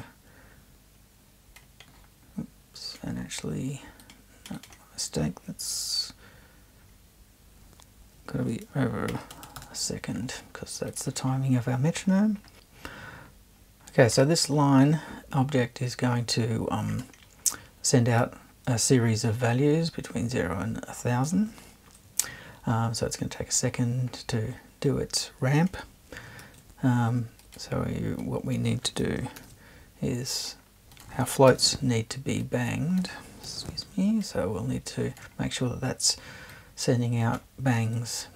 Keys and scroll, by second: 8.9-9.8 typing, 26.4 super+1, 29.4 shift+super+b, 31.5 BackSpace, 33.4 BackSpace.